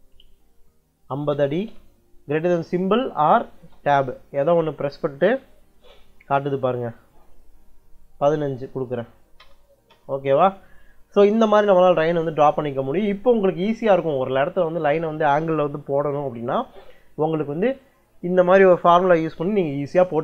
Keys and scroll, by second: 0.9 5, 1.5 ', 4.1 Tab, 8.0 1, 9.2 Return.